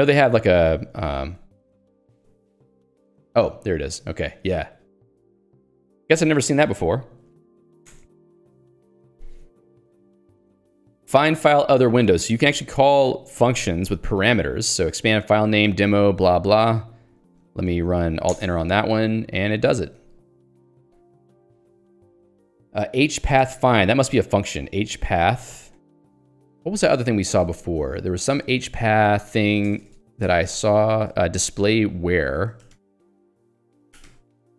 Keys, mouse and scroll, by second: 2.8 ctrl+d, 4.4 ctrl+u, 5.0 ctrl+d, 5.6 ctrl+u, 8.1 Return, 10.5 j, 14.0 l, 16.0 h, 18.5 alt+Return, 20.8-22.4 typing, 24.7-26.6 typing, 27.5 ctrl+g, 28.6 ctrl+s, 28.7-31.0 typing, 31.2 ctrl+j, 31.6 ctrl+g, 32.2 Escape, 32.7 h, 33.6 ctrl+g, 34.1-34.5 typing.